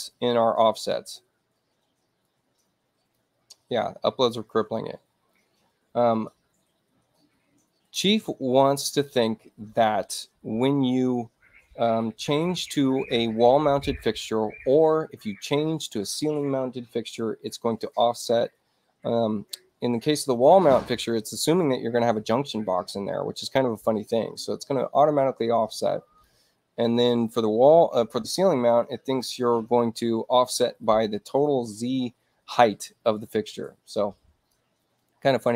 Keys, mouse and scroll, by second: 2.2 click, 5.3-12.3 drag, 22.6-26.2 drag, 33.8 click.